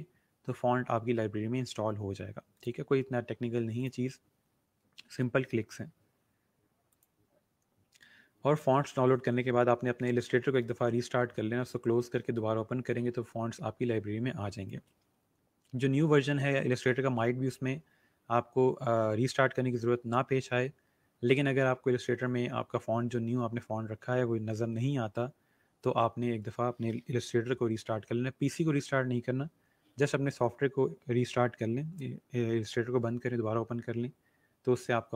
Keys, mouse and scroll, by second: 3.8 click, 6.8 click, 13.5 scroll down 1, 17.5 scroll up 1.